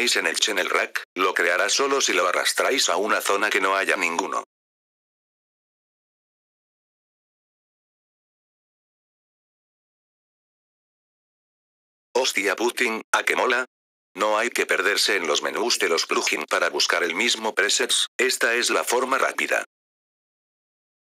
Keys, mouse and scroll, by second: 0.0-4.4 drag, 7.1-8.1 drag, 10.0 click, 12.0 click, 17.7 click, 20.5 click.